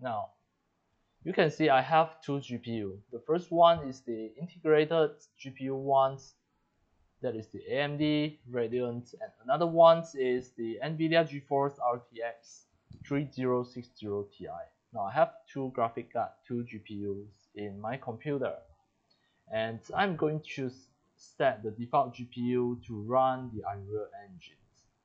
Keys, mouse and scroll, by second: 1.6 click, 24.3 click.